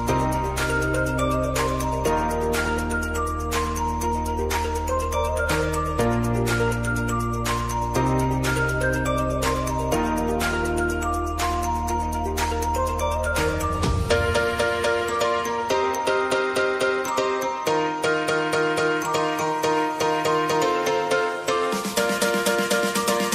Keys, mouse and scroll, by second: 1.0 space, 2.9-4.9 drag, 4.9 F9, 5.9 click, 6.1 space, 7.0 click, 7.5 space, 9.0 click, 9.8 F9, 11.0-13.3 drag, 13.5 space, 14.8 click, 15.3 space, 18.3 click, 18.5 space, 20.1 click, 22.9 space.